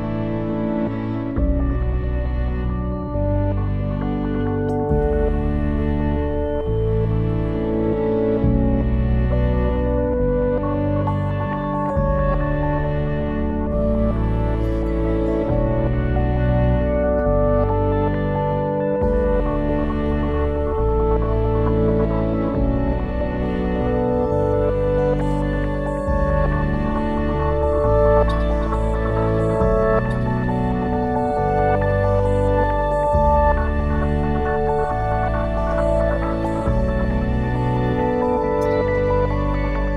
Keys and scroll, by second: 0.0-0.1 typing, 2.6-4.5 typing, 5.3 Return, 6.5 ctrl+s, 16.5 ctrl+s.